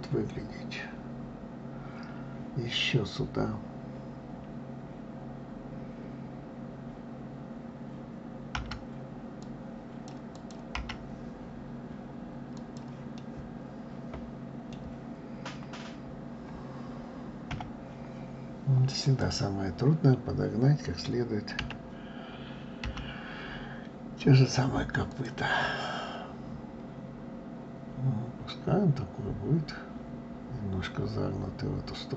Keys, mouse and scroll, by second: 10.3 click, 10.7 g, 13.2-16.2 middle drag, 17.5 KP_7, 19.0 click, 21.6 d, 22.8 g, 25.6-28.6 middle drag.